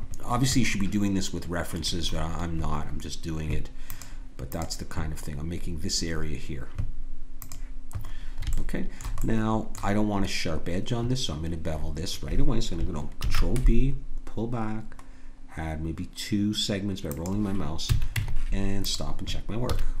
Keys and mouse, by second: 8.0 middle click, 13.2 ctrl+b, 17.9 a, 18.1 Tab, 19.6 a.